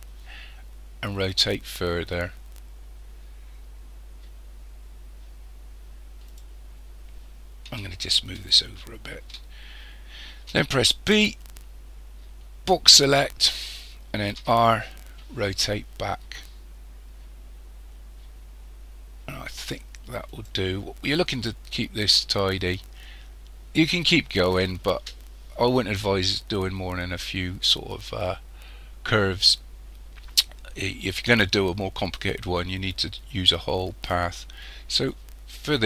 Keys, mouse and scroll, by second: 8.1-10.5 shift+middle drag, 10.5 b, 14.4 r.